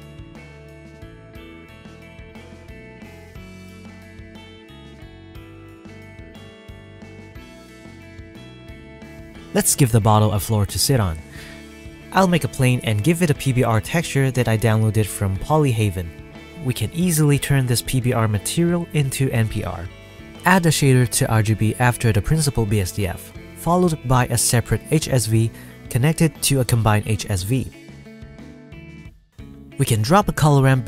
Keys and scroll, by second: 7.2 F12, 12.0 s, 12.2 KP_0, 12.5 s, 12.9 r, 13.0 ctrl+a.